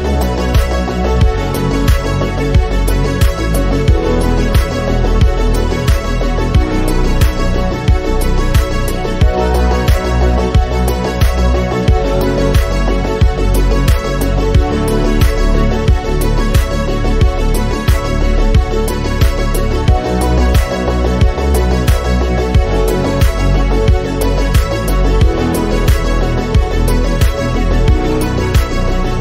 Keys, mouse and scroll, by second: 1.6 click, 2.0-3.2 drag, 6.8 click, 7.4 KP_0, 7.9-8.5 scroll up 3, 8.6 scroll down 1, 10.0 scroll up 1, 10.6 click, 12.0 click, 16.5-18.5 drag, 22.7 click, 23.2 scroll down 1, 23.6 click, 23.8 scroll down 1.